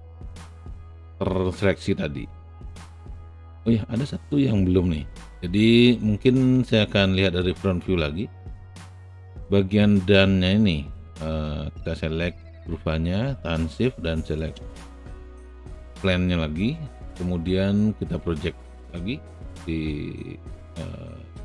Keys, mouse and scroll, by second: 0.1-3.4 alt+right drag, 6.2 space, 6.3-8.7 drag, 9.5 ctrl+alt+click, 12.0 ctrl+alt+click.